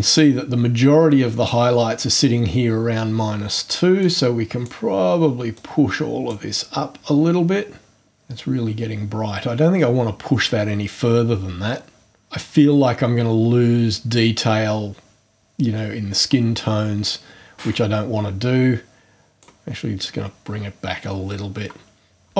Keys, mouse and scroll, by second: 4.0-4.8 drag, 5.5-6.5 drag, 19.3 click.